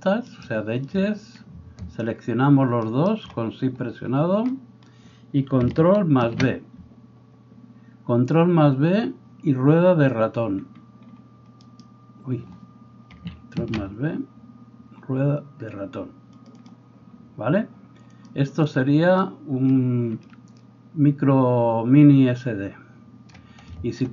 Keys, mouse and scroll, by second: 0.4 right click, 2.9 shift+middle click, 2.9 shift+right click, 6.2 ctrl+b, 16.6-18.3 middle drag, 18.3-24.1 drag.